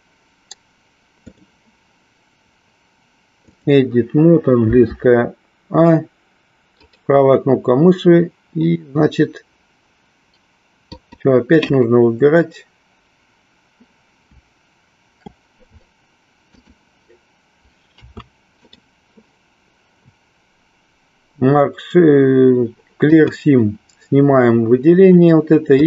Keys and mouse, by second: 1.4-3.7 drag, 6.7-13.9 right drag, 18.7-23.4 right drag.